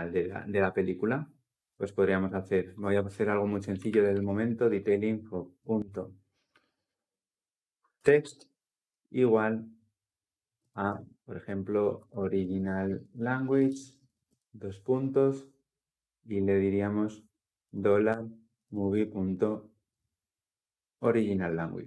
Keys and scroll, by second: 4.6 Return, 21.2 Return.